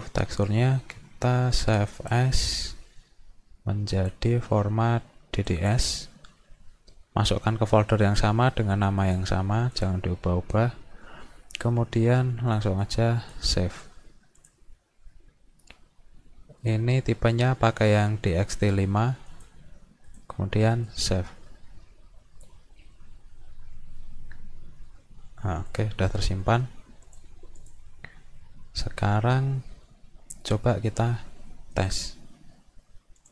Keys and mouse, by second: 2.0 click, 3.9 click, 5.5 click, 9.0 click, 9.8 click, 12.8 click, 14.4 click, 19.3 click, 20.1 click, 20.9 click, 25.7 click, 27.1 click, 27.6 click, 31.7 click, 33.2 click.